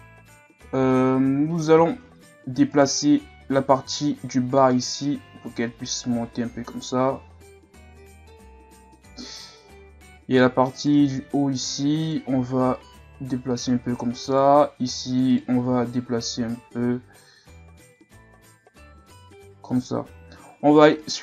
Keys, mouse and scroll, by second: 0.3-1.7 scroll up 1, 1.7 scroll up 1, 1.9-2.7 scroll down 1, 2.7 right click, 3.5 c, 5.3 g, 10.8 right click, 11.1 c, 12.3 g, 14.3 right click, 14.5 c, 15.7 g, 21.0 right click.